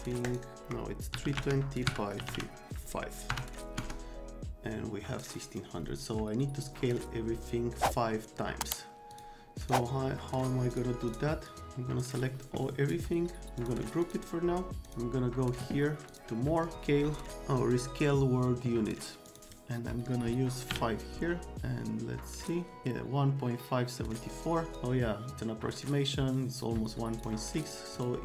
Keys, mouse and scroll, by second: 0.2 right click, 0.6 Escape, 1.1-3.3 typing, 1.9 KP_Subtract, 3.8 KP_Enter, 9.1 click, 9.6 right click, 10.7 click, 11.1 click, 11.5-12.1 drag, 12.9 right click, 13.6 click, 14.0 click, 14.9 click, 16.1 click, 17.7 click, 19.3 click, 20.7 KP_5, 22.4 click, 24.7 click, 27.1 right click, 27.6 click, 28.0 click.